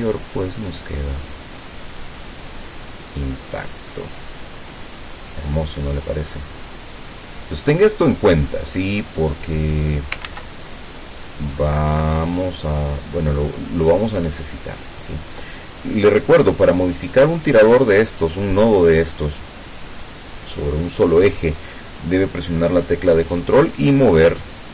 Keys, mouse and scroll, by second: 3.4-7.7 drag, 8.6-10.2 drag, 10.3 ctrl+z, 11.1-15.4 ctrl+drag.